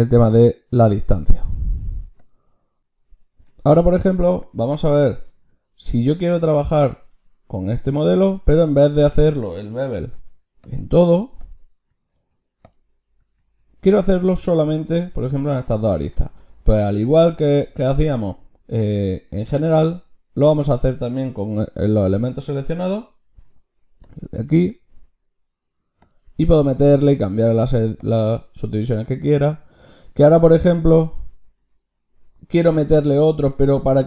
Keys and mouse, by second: 2.8 x, 3.2 shift+a, 7.0 Tab, 8.7 Tab, 9.8 ctrl+shift+q, 13.3 ctrl+z, 14.3 Tab, 14.8-17.6 drag, 23.2 ctrl+shift+q, 29.0-31.5 drag, 31.5 Tab.